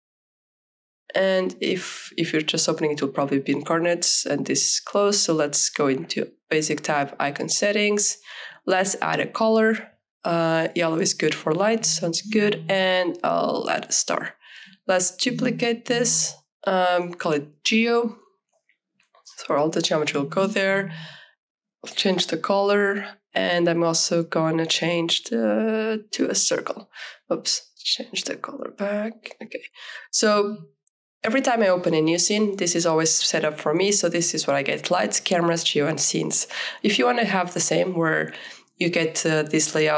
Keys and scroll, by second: 0.2-1.5 typing, 18.6-19.9 typing, 20.2 Return.